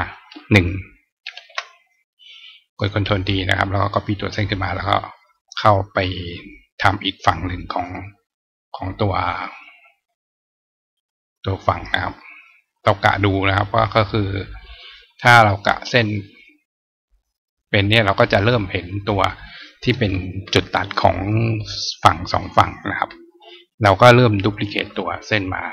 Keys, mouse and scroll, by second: 2.6 click, 3.6-5.2 drag, 6.3-7.7 drag, 9.3-11.3 drag, 12.7 click, 14.8-15.9 drag, 17.4 click, 24.4 click.